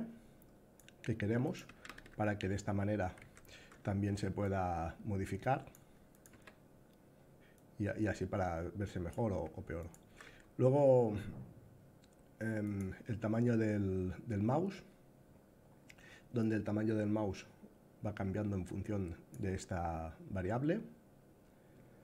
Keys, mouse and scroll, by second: 1.1 click, 1.4 a, 1.5 s, 4.1-5.4 drag, 5.8 click, 6.0 a, 7.3-8.8 drag, 9.5 click, 12.4 click, 16.1-19.0 drag.